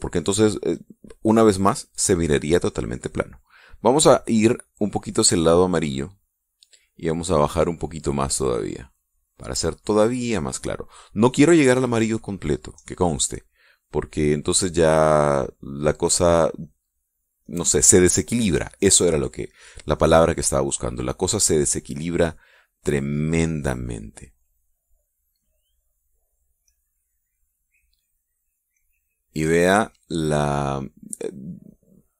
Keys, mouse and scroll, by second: 5.3-7.4 drag, 8.7-10.9 drag, 14.5-15.5 drag, 15.9 click, 17.3 click, 17.6 click, 19.0 click, 22.3-23.4 drag, 23.7 click, 24.4 click, 26.0 click, 27.3 click, 28.4-30.2 drag, 30.7 click.